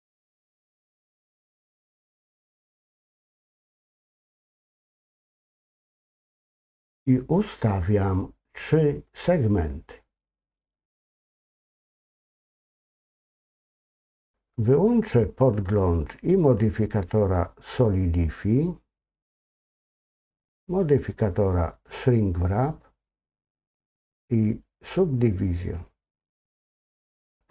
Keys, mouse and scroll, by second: 10.5 click, 12.4-13.2 scroll up 2, 13.2 middle click, 19.5 click, 22.8 click, 26.2 click, 27.4 middle click.